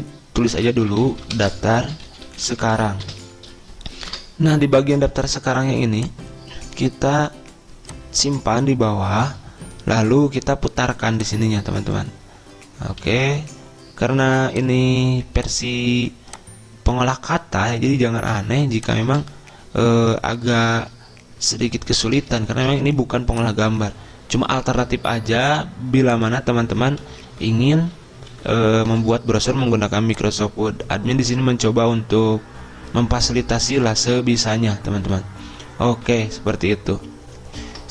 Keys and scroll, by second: 0.6-4.5 typing, 13.5 ctrl+z, 19.5 ctrl+a, 21.0 ctrl+[, 21.1 ctrl+[, 22.6 ctrl+[, 27.6 Right, 27.8 Right, 28.0 Right, 28.4 Right, 28.8 Right, 28.9 Right, 29.4 Up, 34.1 Up, 34.2 Up, 34.4 Right, 34.6 Right, 35.5 Right, 35.9-37.9 Right.